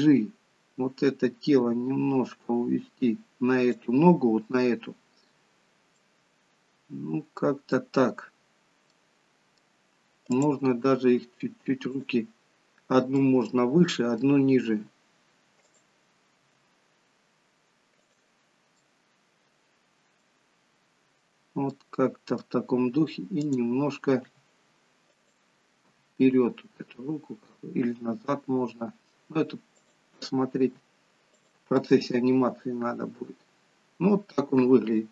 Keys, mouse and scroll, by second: 0.3 scroll up 1, 1.4 g, 5.9 middle click, 8.8 middle click, 10.3 click, 10.7 g, 13.0 middle click, 14.5 g, 16.2 r, 18.7 middle click, 20.2 middle click, 23.5 click, 24.2 r, 25.8 g, 30.6 r, 31.7 middle click.